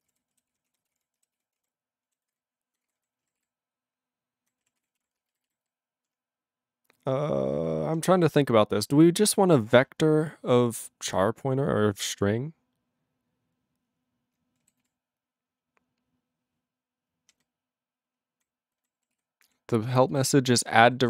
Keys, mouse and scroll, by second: 0.0 ctrl+e, 0.1 ctrl+g, 0.5 ctrl+s, 0.7 ctrl+a, 0.8 ctrl+space, 1.4 ctrl+s, 1.6 ctrl+a, 2.3 ctrl+s, 2.4 ctrl+n, 2.9 ctrl+g, 3.0 ctrl+n, 3.4 ctrl+s, 3.5-4.5 ctrl+n, 4.8 ctrl+s, 4.9 ctrl+p, 5.0 ctrl+e, 5.4 alt+b, 5.5 alt+b, 7.4 ctrl+p, 8.2 ctrl+p, 8.3 ctrl+s, 8.5-9.2 ctrl+n, 9.3 ctrl+n, 9.5 ctrl+n, 9.7 ctrl+p, 9.8 ctrl+e, 14.8 ctrl+s, 15.6-17.3 ctrl+p, 17.4-18.4 ctrl+n, 18.8 ctrl+n, 19.1 ctrl+s, 19.5 ctrl+e, 20.2 alt+b, 20.6 alt+b.